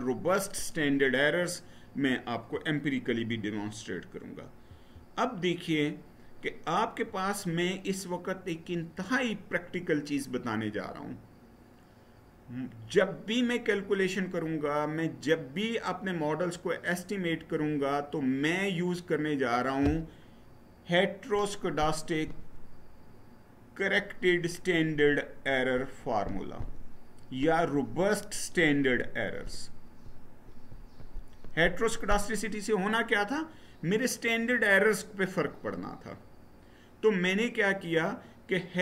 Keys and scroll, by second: 4.4 Right.